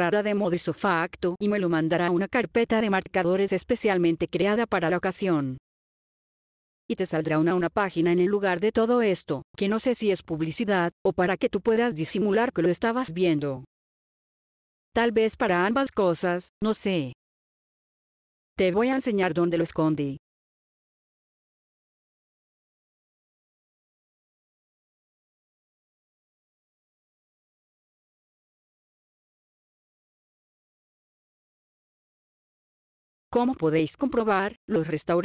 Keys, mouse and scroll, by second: 0.3 click, 6.3 click, 12.4 click, 13.2-13.7 scroll down 4, 13.8 scroll up 3, 17.6 F8, 18.5 click, 23.8 click, 29.2 right click, 30.6 click, 33.2 click.